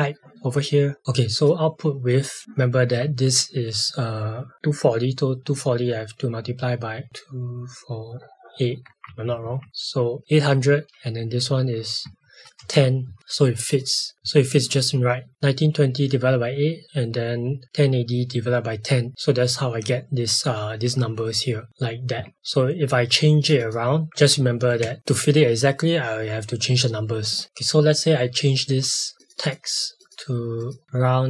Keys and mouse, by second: 9.0 shift+Up, 11.4 click, 12.0 Right, 12.6 KP_0, 13.0 KP_Enter, 13.7 click, 14.1 shift+Up, 14.7 click, 22.3 click, 24.2 Tab, 24.3 Left, 24.6 space, 27.4 click, 29.2 click, 30.8 shift+7.